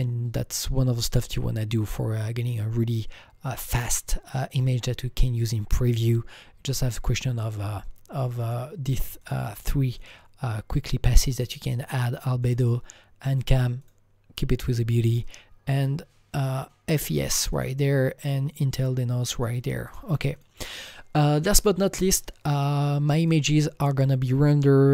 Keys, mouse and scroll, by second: 0.8-4.1 drag, 3.8-4.6 scroll up 3, 4.6-6.0 scroll down 5, 7.2 click, 7.5 click, 7.5 scroll down 1, 8.4 click, 9.2 click, 10.0 click, 12.0 click, 12.6 click, 13.8 click, 15.2 click, 15.7 click, 15.8 double click, 17.5 click, 17.6 click, 19.4 click, 19.9 click, 20.4 click, 23.2 click, 23.3 click.